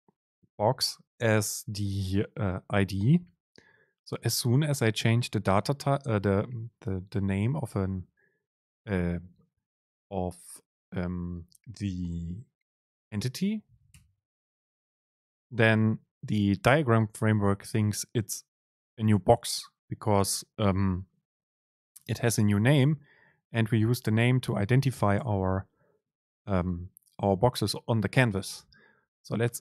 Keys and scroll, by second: 4.3 Right, 8.0 Left, 14.0 BackSpace.